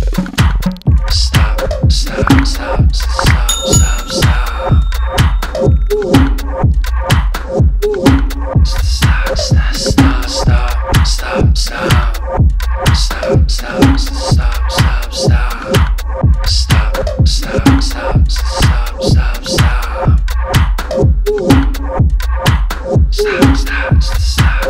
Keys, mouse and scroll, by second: 2.0 click, 6.5 typing, 6.6 ctrl+d, 7.8 click, 15.6 click, 15.7 Up, 16.8 click, 17.0 Up, 19.1 click, 20.0-20.4 typing, 23.2 click.